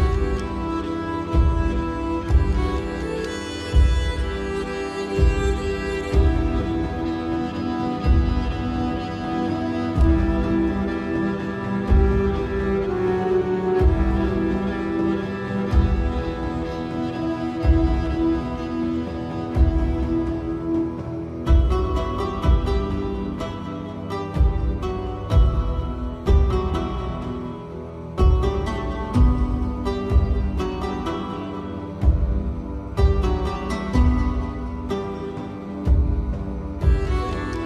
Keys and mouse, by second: 0.2 click, 1.7-4.0 drag, 4.8 click, 5.4 click, 6.1 click, 6.5 click, 7.9 click, 10.3 middle click, 11.7 click, 12.8 KP_7, 14.0 shift+middle click, 15.6 shift+middle click, 22.0 s, 24.7 shift+middle click, 25.7 g, 29.0 s, 37.0-37.6 drag.